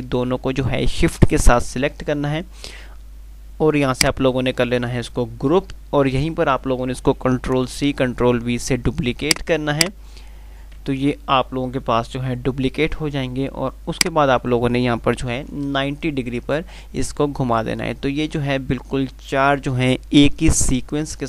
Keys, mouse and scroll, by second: 4.1 click, 9.4-10.5 drag, 11.3 z, 14.1-14.8 drag.